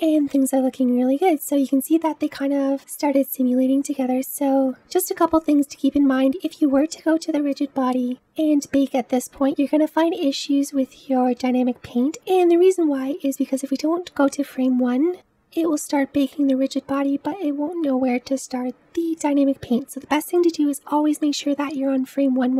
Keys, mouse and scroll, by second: 0.5 space, 1.0-2.8 scroll up 1, 2.8-4.7 scroll down 1, 7.5-9.3 drag, 20.3 click.